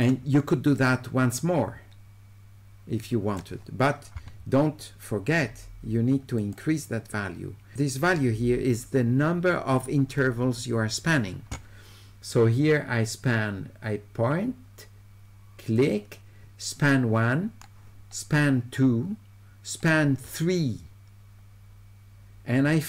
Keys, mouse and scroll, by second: 0.8-3.4 right drag, 6.4 click, 15.8-22.8 drag.